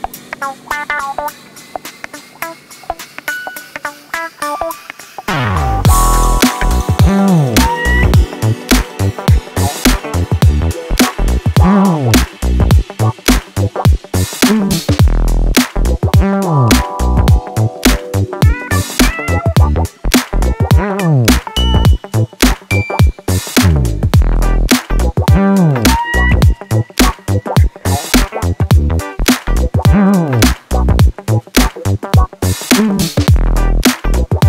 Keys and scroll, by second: 4.5 ctrl+d, 4.9 Escape, 9.2 ctrl+z, 14.9 4, 16.7 3, 20.3 4, 24.0 2, 30.9 4.